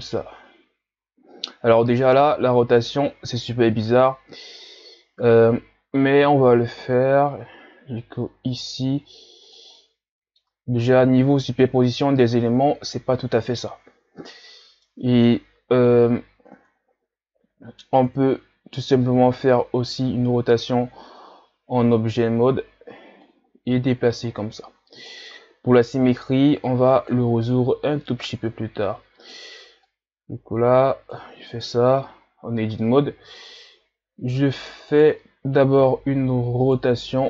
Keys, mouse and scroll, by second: 6.3 r, 9.8-10.8 middle drag, 10.8 ctrl+z, 14.9-16.5 middle drag, 16.5 Tab, 18.1 KP_3, 19.2 r, 23.2-26.0 drag, 26.0 r, 27.5-30.0 drag, 31.4 Tab, 32.1 scroll up 3, 33.2 r, 36.7 right click, 37.1 t.